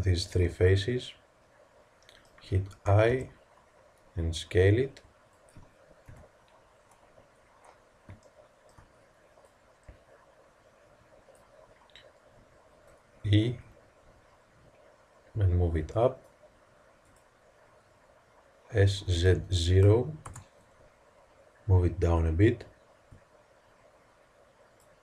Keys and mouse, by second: 3.0 i, 6.0 KP_1, 9.4-11.0 middle drag, 11.6-13.6 middle drag, 13.4 e, 18.7 s, 22.1-24.7 drag.